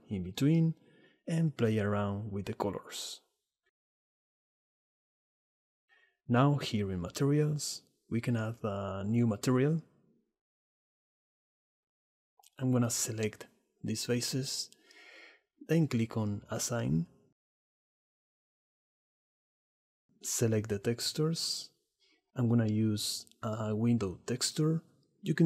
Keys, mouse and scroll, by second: 2.2-3.0 drag, 5.9-7.4 middle drag, 7.4 click, 8.7 click, 9.2 Tab, 9.7 click, 18.7 Tab, 21.1 ctrl+t.